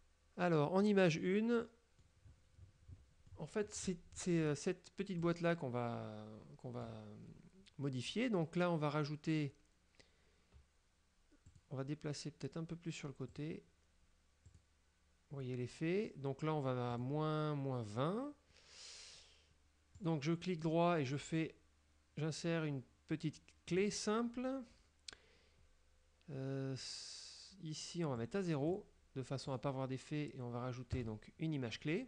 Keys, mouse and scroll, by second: 1.7 middle click, 3.4 middle click, 4.6 scroll up 1, 5.3-7.1 drag, 11.6 click, 13.4 click, 14.6 click, 17.0 click, 20.1 right click, 23.8 click, 28.3 click, 29.6 right click, 31.0 click.